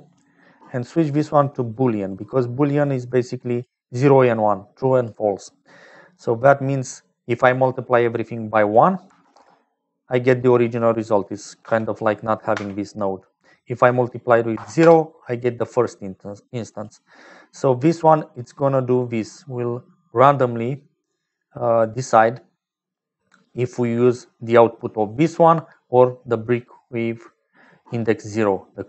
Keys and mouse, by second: 0.9-2.6 drag, 2.9 click, 4.3 click, 6.6 click, 8.7-9.9 drag, 10.7 click, 11.9 m, 12.8 m, 13.8-15.1 drag, 16.4 click, 17.7-20.6 drag, 21.3-23.1 drag, 23.5 click, 24.2-25.4 drag.